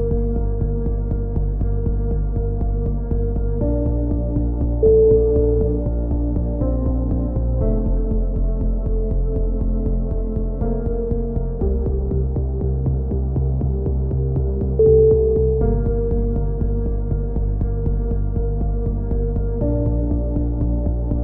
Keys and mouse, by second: 0.8 click, 0.8 right click, 1.0 KP_3, 3.0 right click, 3.4 click, 3.9 right click, 5.7 z, 5.9 click, 7.1 right click, 7.6 f, 7.6 a, 9.6 click, 9.6 right click, 10.2 e, 10.6 click, 12.3 KP_3, 12.4 z, 12.8 click, 13.8 s, 14.6 click, 15.6 e, 16.1 click, 19.1 click, 19.1 right click, 20.2 right click, 20.4 click.